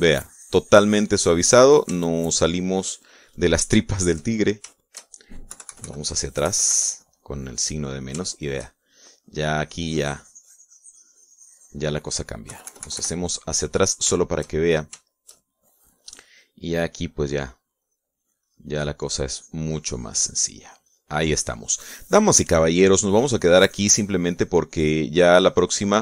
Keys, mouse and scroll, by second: 3.3-5.9 shift+drag, 6.0 shift+click, 8.9 middle click, 9.6 shift+middle click, 10.3-13.2 shift+drag, 13.8 KP_Subtract, 14.6 middle click, 14.8 click, 15.5 shift+click, 16.5 shift+click, 16.9 shift+click, 17.6-19.0 drag, 19.1-26.0 drag.